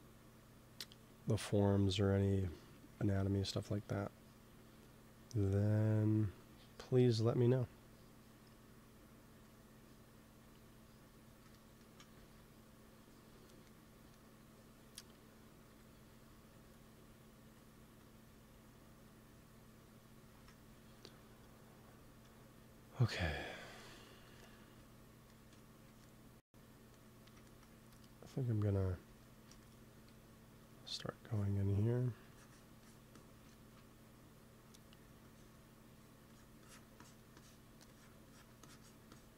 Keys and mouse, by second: 2.8 ctrl+s, 5.4 click, 11.4 middle click, 12.1 ctrl+s, 15.6 KP_1, 20.2 ctrl+s, 27.7 f, 29.9 f, 30.7-39.3 drag.